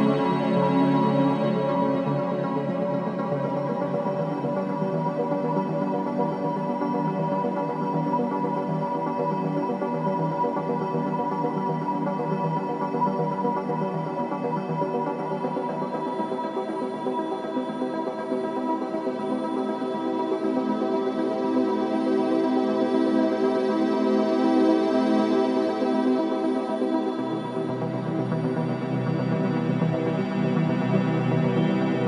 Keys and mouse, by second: 0.7 click, 1.4-4.9 drag, 5.6-6.7 drag, 6.7 Tab, 7.4 Tab, 8.9 Tab, 10.8 alt+click, 16.7 alt+click, 17.4 click, 18.5-20.3 drag, 21.6 click, 23.6 i, 24.7-26.3 drag, 27.6-28.9 drag, 29.4 i.